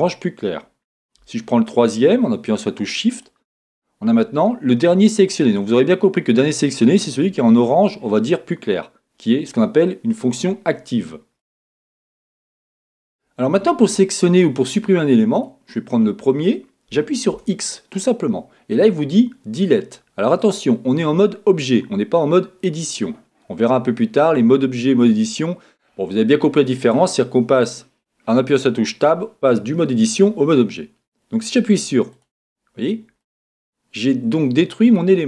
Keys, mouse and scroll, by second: 3.1 shift+click, 5.4-10.3 middle drag, 10.3-11.0 scroll up 2, 10.5 middle click, 11.0-15.4 middle drag, 11.0-11.4 scroll down 2, 12.7-13.4 scroll up 2, 13.4-15.4 scroll down 2, 15.4 click, 15.5-17.5 middle drag, 17.5 x, 33.2-35.2 middle drag.